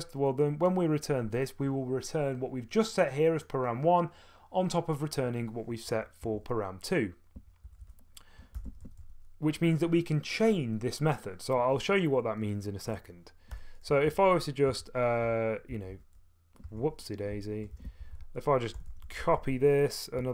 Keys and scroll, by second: 6.3 Escape, 7.3-9.5 typing, 13.3-20.3 typing, 14.7 Escape, 16.7 Escape.